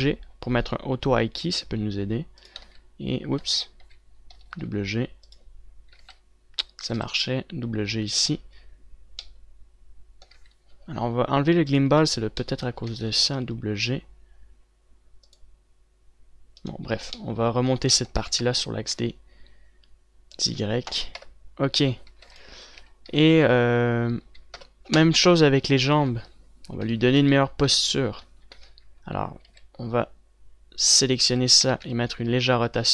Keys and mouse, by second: 3.1 click, 3.3 z, 4.3 ctrl+z, 4.3 click, 5.1 g, 6.9 ctrl+z, 7.5 g, 11.3 ctrl+z, 13.5 g, 17.6 z, 18.4 z, 18.9 r, 21.9 KP_0, 22.8 a, 23.0 ctrl+s, 23.5 z, 23.7 z, 25.3 KP_1, 30.1 z, 31.9 z, 32.3 r.